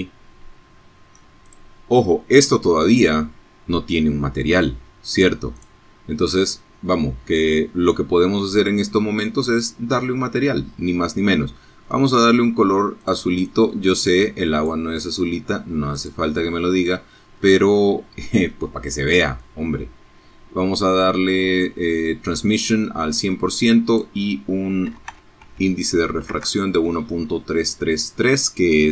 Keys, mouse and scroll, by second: 3.5 click, 7.1-8.5 scroll down 3, 8.6-9.0 scroll up 2, 9.7 scroll up 2, 10.9 click, 12.4 click, 13.9 click, 15.3-16.0 scroll down 3, 17.4-20.5 drag, 21.8 click, 22.8 KP_1, 23.0 KP_Decimal, 23.3 KP_3, 24.2 KP_Enter.